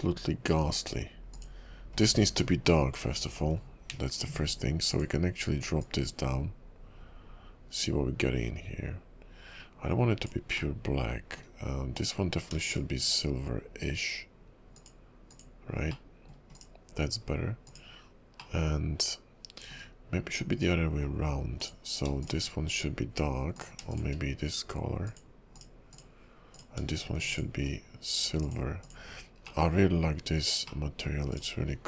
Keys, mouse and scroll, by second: 1.4 click, 2.0 click, 4.9 click, 10.7 middle click, 11.9 click, 12.6 shift+click, 14.8 click, 16.0 middle click, 16.6 click, 17.7 click, 18.5 middle click, 21.6 click, 22.2 shift+click, 23.6 click, 23.9 shift+click, 25.0 click, 25.9 click, 26.6 click, 27.3 shift+click, 28.4 click, 29.6 middle click, 30.8 middle click, 31.3 click, 31.7-31.8 scroll up 3.